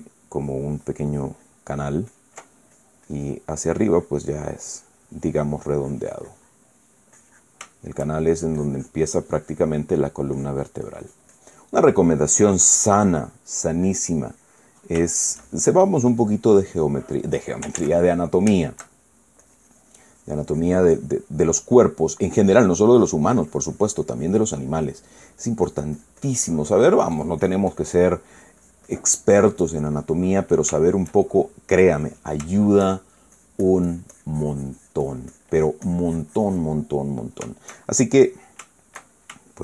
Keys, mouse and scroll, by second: 1.1-2.5 ctrl+drag, 2.8 ctrl+click, 3.5 ctrl+click, 4.3-7.4 ctrl+drag, 7.5 middle click, 8.4 shift+middle click, 9.3-14.6 shift+drag, 14.2 middle click, 14.7 click, 15.9 shift+middle click, 16.2-18.0 shift+drag, 18.5 ctrl+z, 18.8-20.0 ctrl+middle drag, 20.1-22.7 shift+drag, 22.7 middle click, 23.7-25.6 drag, 25.6 middle click, 26.4-27.7 drag, 27.7 middle click, 28.1 click, 28.9 middle click, 29.3-30.6 drag, 30.7 middle click, 31.5 shift+middle click, 32.4 shift+click, 33.2 shift+middle click, 34.1-37.9 shift+drag, 37.9-39.6 shift+middle drag.